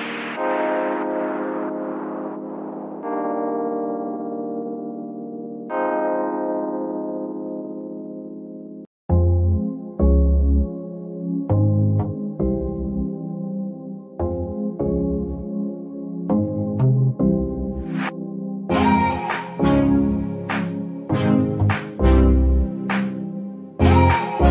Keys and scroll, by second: 1.3 Escape, 5.7 z, 16.9 ctrl+shift+Tab, 17.9 z.